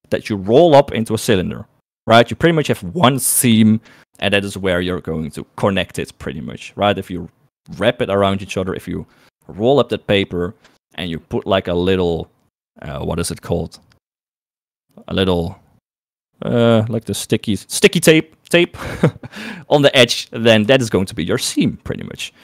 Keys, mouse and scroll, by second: 20.8 shift+middle click, 21.8 middle click.